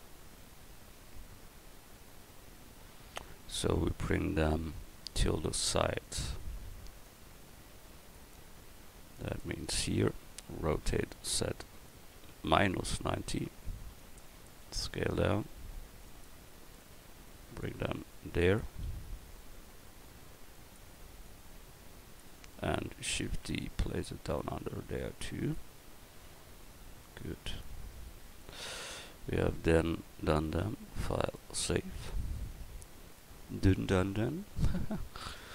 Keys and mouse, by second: 5.1-6.0 drag, 8.2-9.4 drag, 9.7 click, 10.9 r, 14.6 s, 18.9 s, 23.3 shift+d, 28.2 a, 30.4-32.4 drag.